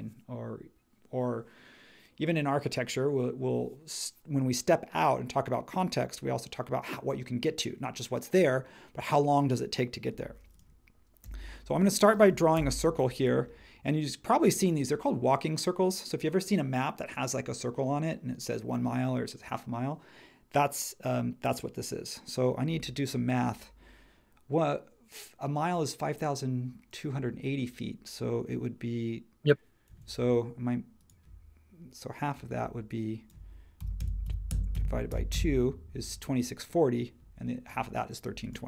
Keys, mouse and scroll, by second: 11.2 c, 12.5 click, 29.9 Escape, 33.5-35.6 typing.